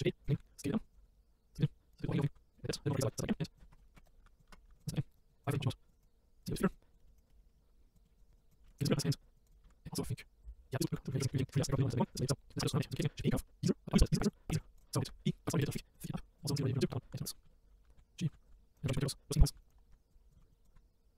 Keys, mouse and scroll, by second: 0.4 s, 0.8 click, 1.9 click, 2.9 right click, 3.6 click, 3.8 right click, 3.9 Tab, 4.0 right click, 4.2 a, 4.4 click, 4.5 Tab, 4.6 a, 4.7 right click, 5.3 click, 5.5 Tab, 5.9 click, 6.7 click, 6.9 click, 7.0 middle click, 7.3 middle click, 7.4 scroll up 3, 7.5 middle click, 8.0 middle click, 8.4 click, 8.6 shift+middle click, 9.2 click, 9.5 click, 9.6 shift+middle click, 10.2 click, 10.4 middle click, 10.9 click, 11.2-11.6 middle drag, 11.6 click, 12.5 click, 12.9 shift+a, 14.5 s, 14.8 click, 15.1 Tab, 15.2 click, 15.6 click, 15.9 click, 17.1-21.1 typing, 17.4 scroll up 2, 17.4 shift+middle click, 18.2 click, 18.9 shift+middle click, 19.1 scroll up 2, 19.8-20.3 scroll down 4, 20.3 click, 20.4 shift+middle click, 20.5 click.